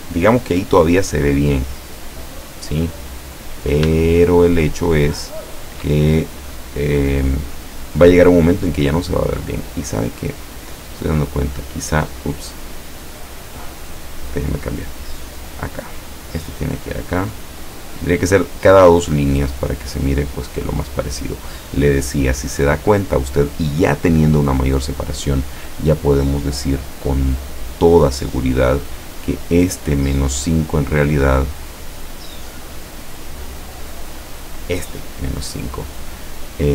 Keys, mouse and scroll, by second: 4.1-5.7 shift+drag, 6.5 scroll up 2, 7.4 scroll down 2, 11.0-11.8 drag, 12.6 click, 13.6 click, 14.7-16.3 drag, 17.0-18.7 drag, 19.2-21.1 drag, 28.1 click, 28.8 click, 32.5 click, 33.6 click, 34.5 click.